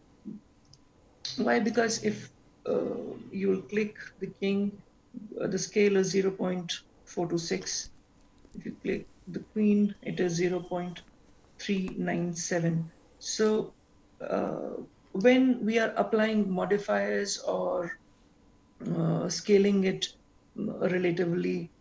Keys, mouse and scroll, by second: 0.6 click, 1.8 click, 8.3 click, 13.7 click, 15.4 click.